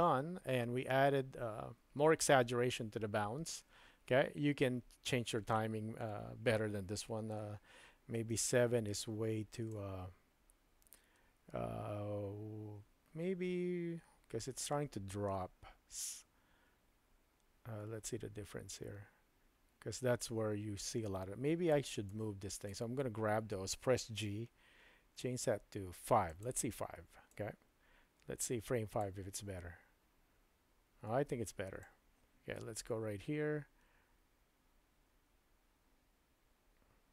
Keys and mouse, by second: 8.2 space, 9.8-21.8 drag, 22.1-22.7 drag, 24.4 g, 27.3-29.0 drag, 29.3 space, 31.2 space, 31.9-37.1 drag.